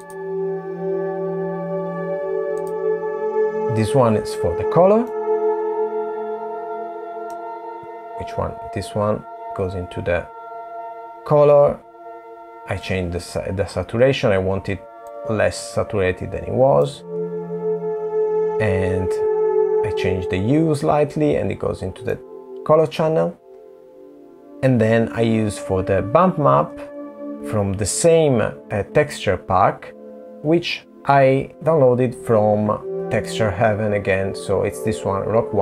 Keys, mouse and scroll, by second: 0.7 middle click, 12.9 super+z, 17.8 middle click, 22.9 click.